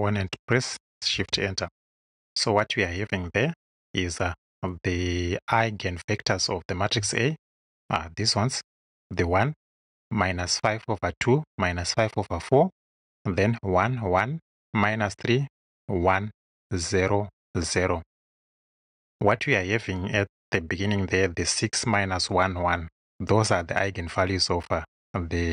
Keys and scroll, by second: 1.2 shift+Return.